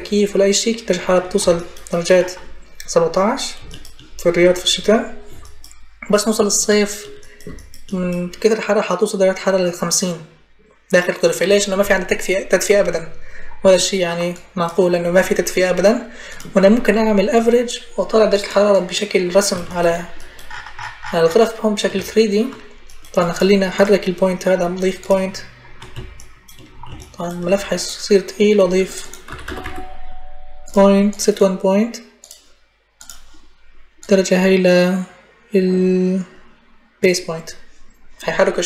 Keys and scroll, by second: 28.8-30.0 typing.